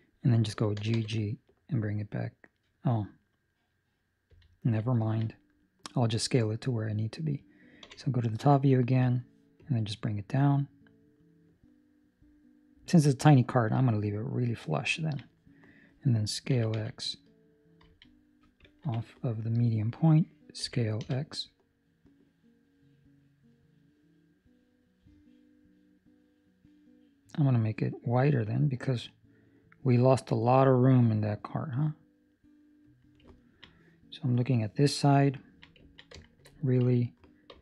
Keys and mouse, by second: 0.7 g, 4.9 ctrl+middle click, 5.6 middle click, 8.9 click, 8.9 KP_7, 9.5 click, 14.9 ctrl+middle click, 16.5 s, 20.5 s, 33.3 ctrl+middle click, 35.3 ctrl+middle click, 36.1 shift+middle click, 36.4 shift+middle click, 37.4 ctrl+r.